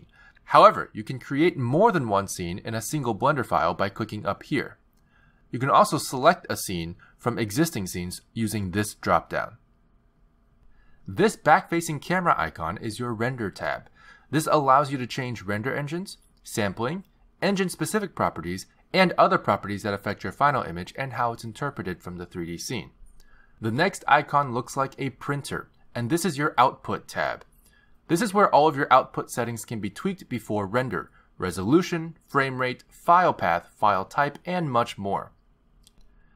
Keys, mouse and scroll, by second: 4.3 click, 6.9 click, 9.2 click, 10.3 click, 11.5 click, 26.6 click, 31.2-32.2 scroll down 5, 32.2 scroll down 1.